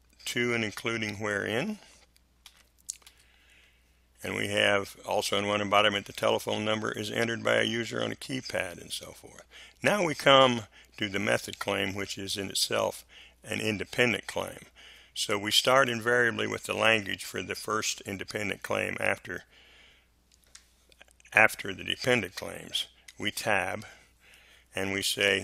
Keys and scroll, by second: 2.4 Delete, 23.1 Tab.